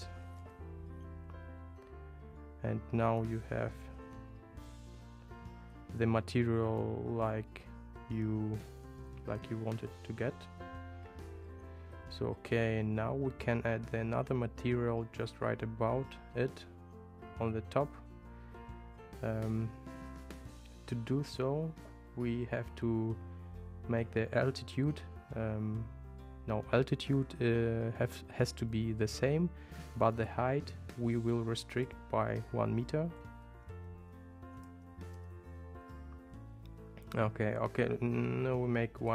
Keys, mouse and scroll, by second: 30.2 click, 34.0 BackSpace, 39.0-39.1 drag.